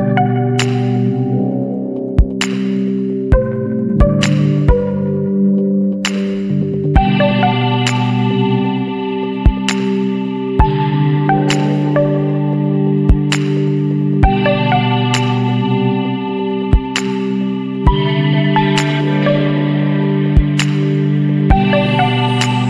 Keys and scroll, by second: 0.3 [, 0.9 [, 2.2 ], 8.0 KP_8.